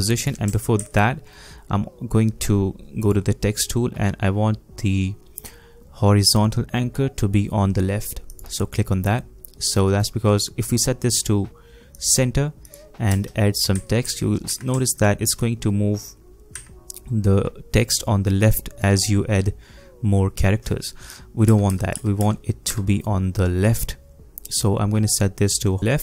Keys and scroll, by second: 0.8 ctrl+z, 13.1 space, 13.7 a, 14.0 a, 14.5 a, 16.5 a, 21.5 BackSpace, 21.7 BackSpace, 21.9 BackSpace, 22.7 BackSpace.